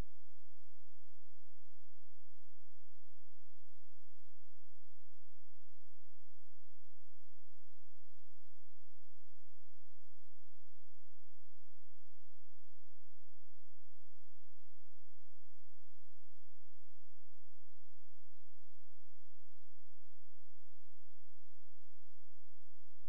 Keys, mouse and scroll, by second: 0.3 click, 3.6 ctrl+a, 4.9-9.8 typing, 9.9 ctrl+space, 10.9 click, 17.3 space, 17.5 click, 18.2-18.7 scroll down 1, 18.7-19.1 scroll up 1, 19.1-20.9 scroll down 1, 20.9 click, 22.4 right click.